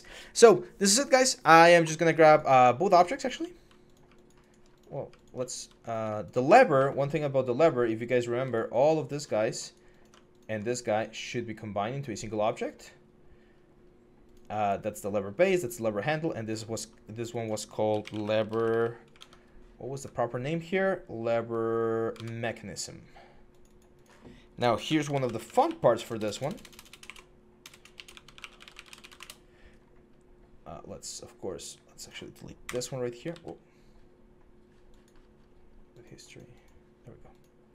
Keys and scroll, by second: 17.7-19.0 typing, 19.8 alt+Tab, 21.9 alt+Tab, 24.8-27.4 typing, 29.0 Return, 32.4 Delete, 33.1 ctrl+z.